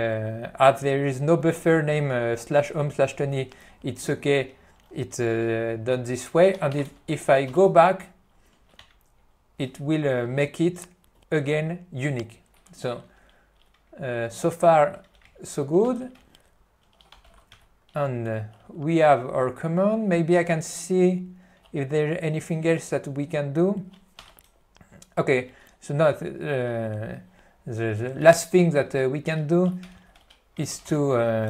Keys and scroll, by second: 15.4 ctrl+o, 15.9 ctrl+e, 17.6 Return, 25.4 p, 26.1 n, 28.6 q, 30.0 ctrl+n, 30.8 alt+c, 31.0 b.